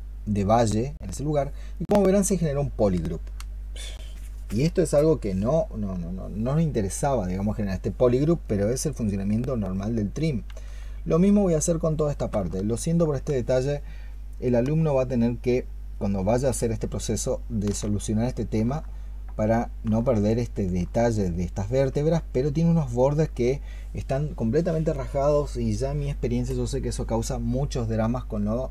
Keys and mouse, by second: 16.1 ctrl+shift+click, 17.5 ctrl+shift+click.